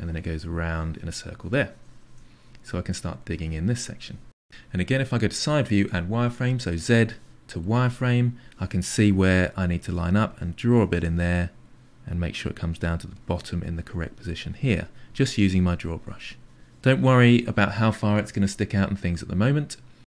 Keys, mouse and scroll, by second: 0.3 click, 1.3 shift+click, 1.5 middle click, 1.9-3.5 ctrl+drag, 3.7 middle click, 3.9 shift+click, 5.2 KP_3, 7.2 z, 9.1 click, 9.8 click, 10.1-13.1 drag, 13.3-15.6 drag, 15.7 click, 16.0 click, 16.4 click, 16.9 click, 17.1 click.